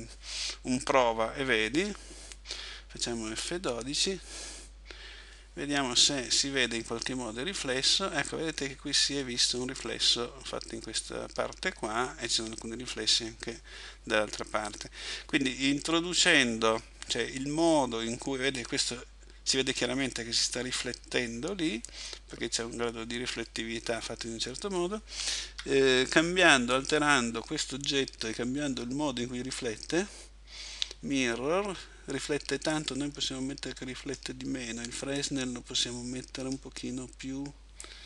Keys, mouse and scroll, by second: 25.5 Escape, 26.8 right click, 29.9-32.2 scroll down 3, 34.2 click, 35.3 click, 37.9 click.